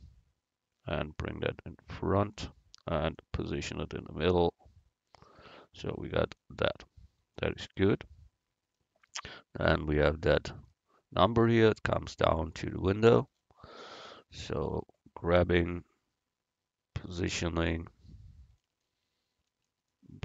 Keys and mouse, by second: 3.2-5.4 middle drag, 6.7 a, 15.5 g, 17.7-19.8 middle drag.